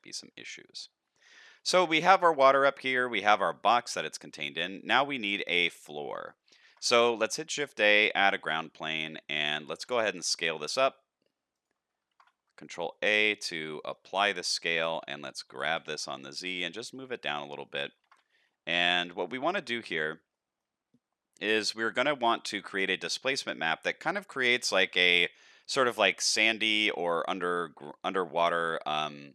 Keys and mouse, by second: 0.0 shift+middle click, 0.3-0.7 middle drag, 1.0 shift+middle click, 1.5-2.0 middle drag, 2.8 shift+middle drag, 4.5 shift+middle drag, 5.6-6.3 middle drag, 6.5 shift+middle drag, 7.0 shift+a, 9.0 middle drag, 9.7 s, 12.1 ctrl+a, 13.8 shift+middle click, 14.1-14.5 middle drag, 14.7 shift+middle click, 15.4 g, 17.6 middle drag, 18.0 ctrl+a, 19.0 shift+middle click, 19.3 middle click, 20.3 middle click, 21.6 middle click, 23.5-23.9 middle drag.